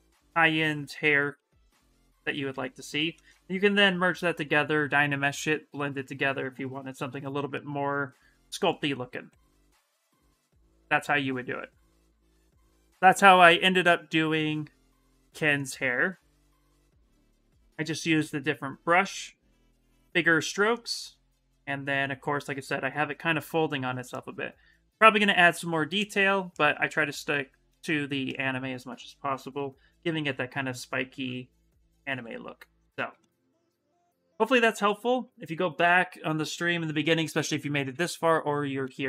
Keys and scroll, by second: 2.8 shift+f, 4.6 s.